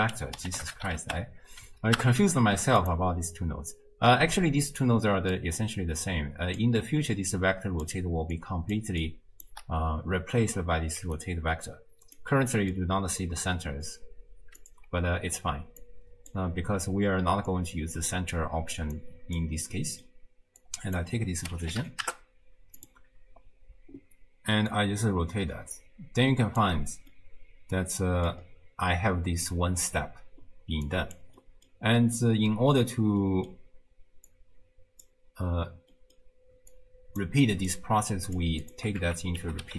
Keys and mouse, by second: 5.6-6.6 drag, 6.9-9.6 typing, 7.4 click, 8.4 click, 9.0 click, 11.0 d, 12.2 d, 12.6 click, 12.6 d, 14.7 click, 15.4 ctrl+x, 15.8 click, 17.5-18.4 drag, 19.0 click, 19.7 click, 20.6-23.0 drag, 24.7-26.7 drag, 27.2-28.3 drag, 31.1 click, 31.4 click, 32.2 click, 33.2 click, 34.5 click, 35.9 middle click, 36.7 click, 37.7 click, 39.1 ctrl+a.